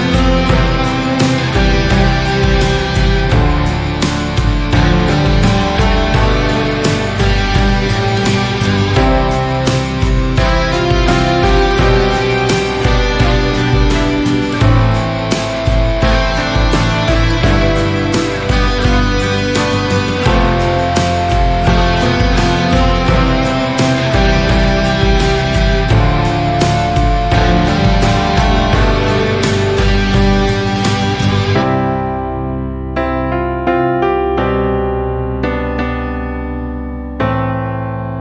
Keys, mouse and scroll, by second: 0.1 click, 0.5 click, 1.1 Tab, 1.6-2.4 scroll up 3, 2.4 3, 3.1 alt+z, 3.2 alt+click, 4.1 alt+z, 5.2 shift+d, 6.9 p, 7.7 click, 8.4 Tab, 8.8 click, 9.4 click, 11.0 shift+s, 12.9 scroll down 3, 13.2-15.3 middle drag, 16.6 shift+a, 17.9 shift+s, 21.4 click, 22.0 click, 22.3-23.3 middle drag, 23.3 scroll up 2, 23.7-25.8 right drag, 25.8 scroll down 1, 26.1 shift+s, 27.8 click, 29.5 scroll down 1, 29.8-30.4 shift+middle drag, 30.4 KP_1, 31.0 KP_3, 31.5 scroll up 3, 32.4 click, 34.2-34.6 scroll down 5, 35.9 KP_3, 37.2 KP_7.